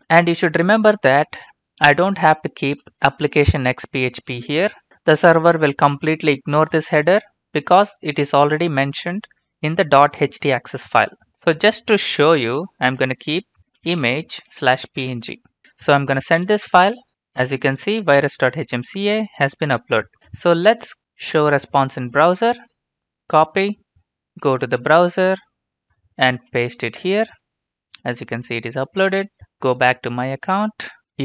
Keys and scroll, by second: 13.4-15.5 typing, 16.7 ctrl+space, 26.5 ctrl+v, 27.0 Return.